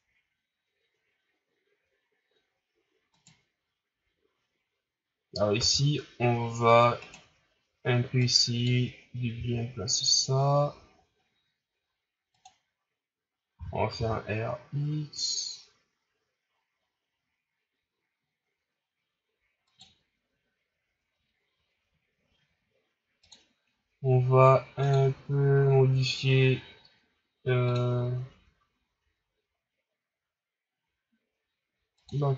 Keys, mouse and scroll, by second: 3.1 right click, 5.5 r, 8.1-9.3 drag, 9.3 s, 13.5 r, 23.3 click.